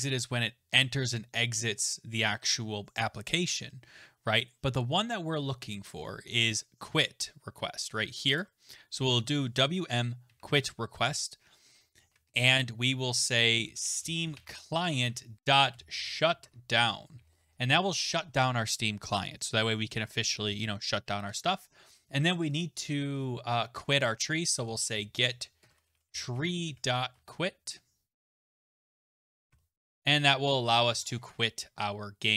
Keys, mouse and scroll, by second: 3.9-5.2 scroll, 8.4 click, 10.3 Right, 12.0 shift+[, 12.3 Return, 13.4-15.7 typing, 16.4 Tab, 21.3 Return, 24.3-30.8 typing, 30.9 ctrl+s.